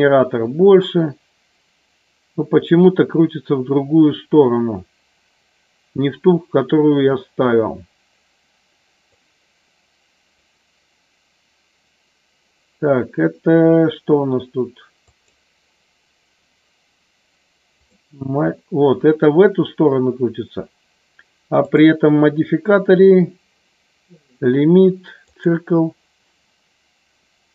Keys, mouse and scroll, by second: 9.1-10.4 drag, 15.1 click, 17.8-19.1 drag, 21.7-25.5 drag.